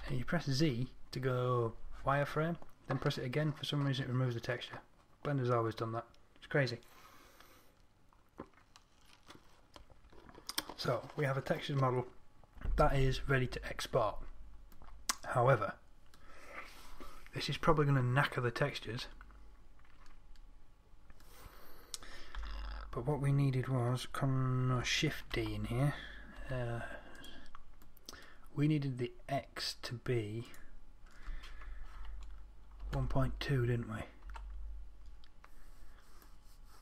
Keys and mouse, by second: 0.1 z, 0.3 z, 22.7 Tab, 25.7 shift+d.